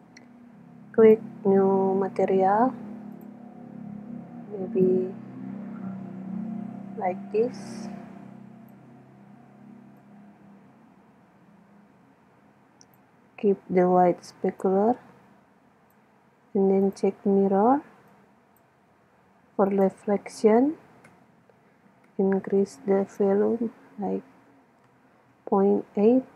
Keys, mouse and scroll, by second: 3.2-5.0 drag, 10.0-11.8 drag, 14.7-16.4 drag, 16.9-21.4 drag, 21.5 click.